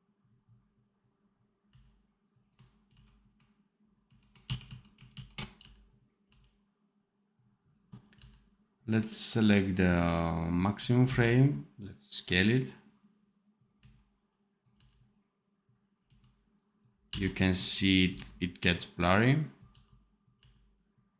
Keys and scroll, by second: 1.6 c, 2.8 ctrl+z, 3.9 ctrl+shift+z, 4.4 ctrl+z, 5.0 ctrl+shift+z, 5.5 v, 6.2 c, 8.1 v, 10.9 x, 13.7 c, 14.6 v, 15.9 x, 17.0 v, 18.0 x, 19.6 c, 20.3 v.